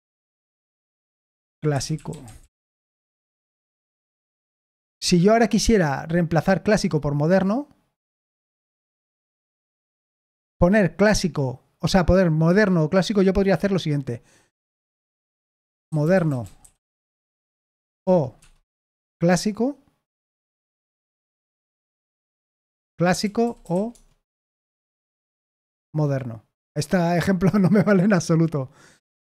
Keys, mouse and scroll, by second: 0.0-2.8 typing, 14.2-19.1 typing, 20.2-25.2 typing, 24.8 Escape.